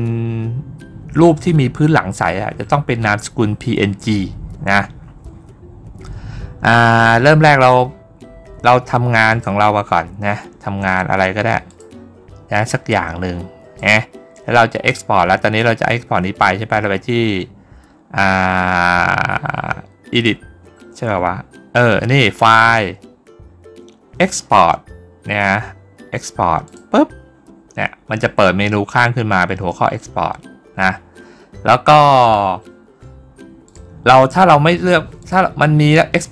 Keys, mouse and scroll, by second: 9.1 click, 11.5 click, 12.5-13.6 drag, 20.0 click, 26.5 click, 33.5 click, 35.0 click.